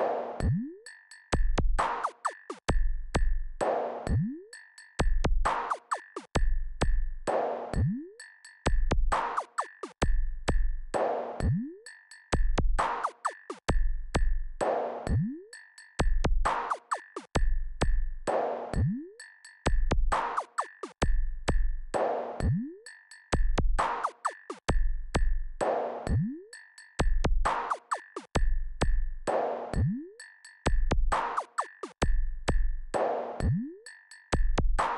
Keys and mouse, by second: 11.5 KP_Add, 17.4-21.2 drag, 34.0 click.